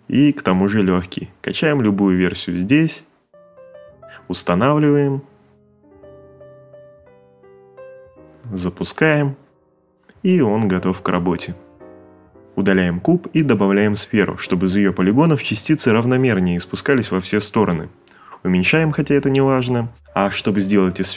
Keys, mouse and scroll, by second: 10.8 Delete, 13.3 click, 14.2 click, 15.4 click, 16.1 click, 16.4 8, 16.6 click.